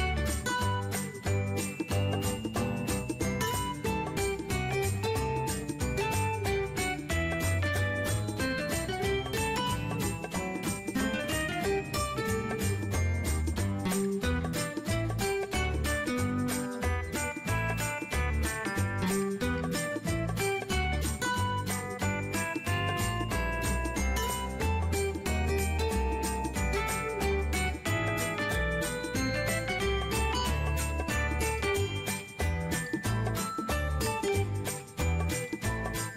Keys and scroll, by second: 5.0 ctrl+x, 5.4 ctrl+shift+v, 26.7 ctrl+v, 28.2 ctrl+x, 28.8 ctrl+shift+v, 35.0 ctrl+x, 35.5 ctrl+shift+v.